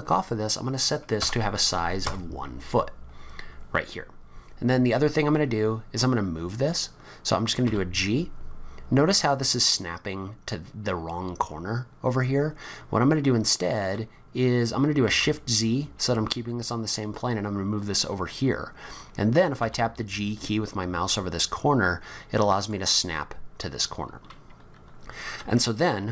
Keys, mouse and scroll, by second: 6.6-7.4 scroll up 5, 7.6 g, 19.6 g, 26.0 scroll up 4.